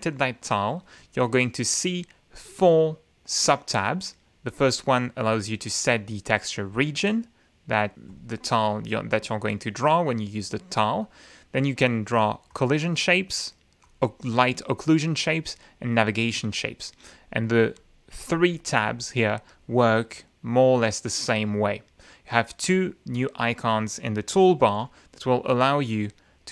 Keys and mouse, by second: 4.5 click, 12.5 click, 13.8 click, 15.4 click, 17.1-17.7 drag, 17.7 click, 18.2-19.1 drag, 19.5 click, 24.6 F9, 25.3-26.5 drag.